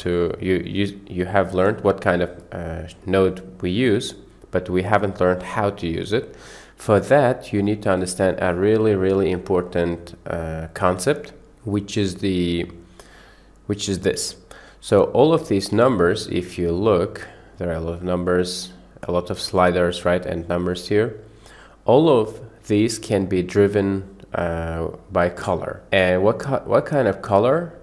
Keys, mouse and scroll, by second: 0.7 click, 5.3-5.8 drag, 14.0 click, 16.3 click, 16.8 click, 17.5 click, 17.9 click, 18.7 click, 20.8 click.